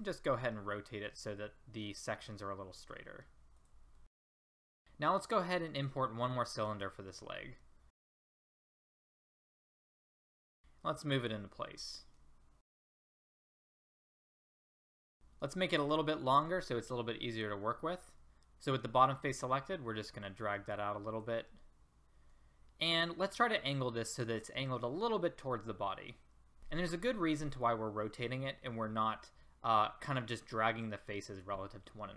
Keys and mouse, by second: 2.9-4.4 middle drag, 4.7 middle click, 8.0 a, 9.0 click, 9.2 s, 9.8 s, 11.5 click, 12.4 middle click, 13.3 click, 13.5 middle click, 13.6 middle click, 14.0 middle click, 14.7 middle click, 19.4-24.1 drag.